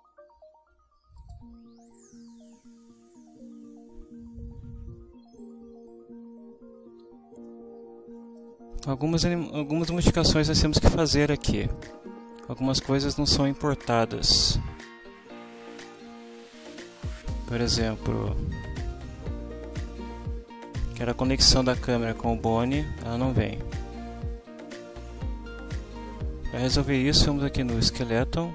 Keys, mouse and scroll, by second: 1.2 click, 7.4-8.6 ctrl+middle drag, 8.8 ctrl+scroll up 2, 9.1 middle click, 9.2 scroll down 2, 10.6 ctrl+middle click, 11.3 ctrl+middle click, 15.8 click, 17.3 click, 18.8 click, 20.0-26.1 drag, 28.0 click.